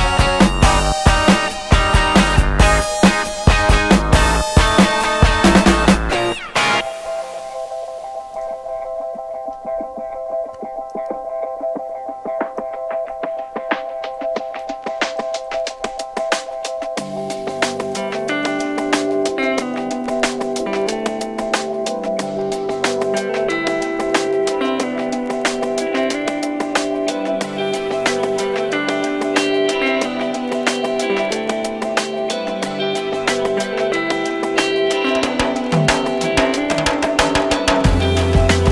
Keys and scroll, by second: 19.2 Escape, 19.3 d, 20.0 0, 20.1 Return, 36.6 Escape, 37.6 3, 37.7 Return.